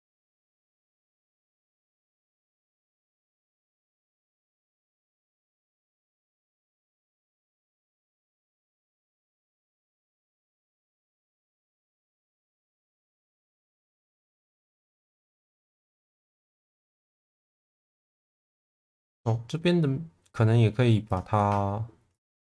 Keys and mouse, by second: 0.1 shift+v, 2.1 click, 2.4 shift+v, 4.3 click, 4.7 shift+middle click, 6.1 click, 8.1 click, 9.9 click, 10.6 click, 11.9 click, 12.2 click, 12.8 middle click, 13.4 shift+middle click, 13.8 Tab, 14.3 Tab, 14.5 middle click, 15.6-16.7 middle drag, 18.5 click, 22.2 ctrl+click.